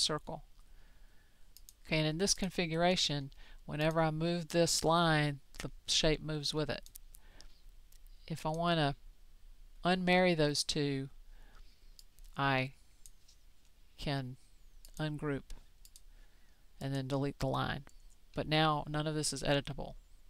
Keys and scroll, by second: 0.0-1.0 typing.